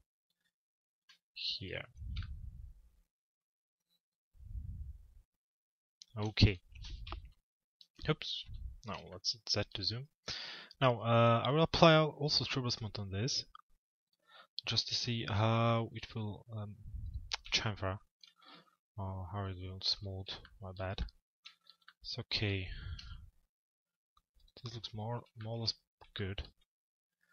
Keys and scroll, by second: 1.1 p, 22.6 F4.